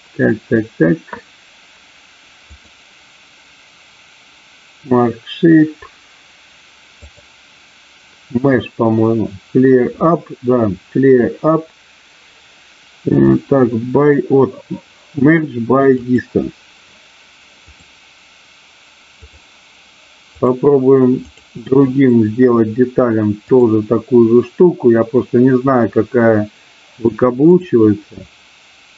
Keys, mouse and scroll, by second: 2.5-5.6 drag, 7.0-16.3 drag, 17.6-19.3 drag, 20.3 click, 21.3 click, 23.5-27.8 drag.